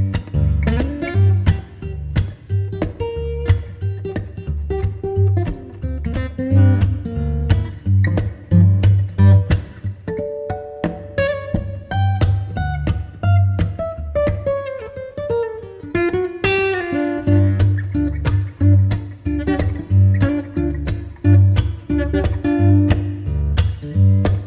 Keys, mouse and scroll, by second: 1.0 Tab, 1.4-5.9 middle drag, 5.9 click, 8.0-11.1 drag, 11.9-15.0 drag, 16.2-18.7 drag, 18.7-19.8 middle drag, 19.8 scroll up 2, 20.2-22.0 middle drag, 22.0-24.4 drag.